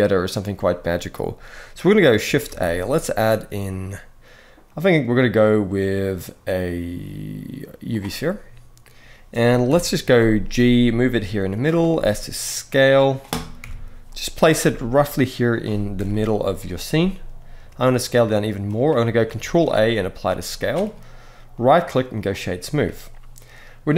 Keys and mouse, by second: 2.2 shift+a, 9.4 KP_7, 10.3 g, 11.4 drag, 11.6 s, 13.3 KP_1, 14.4 g, 15.2 click, 15.7 KP_0, 16.6 s, 19.1 ctrl+a, 21.3-22.0 right drag.